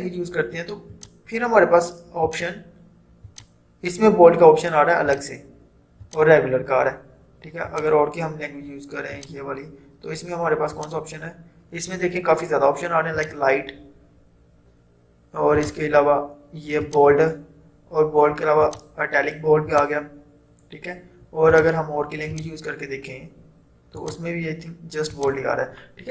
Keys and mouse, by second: 13.2 click, 15.6 click.